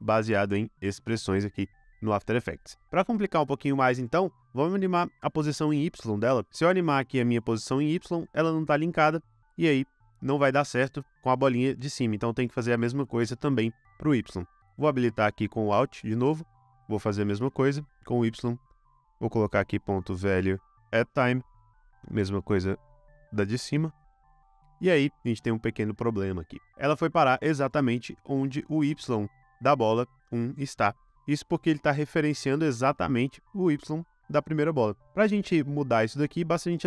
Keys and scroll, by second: 19.3-24.8 typing.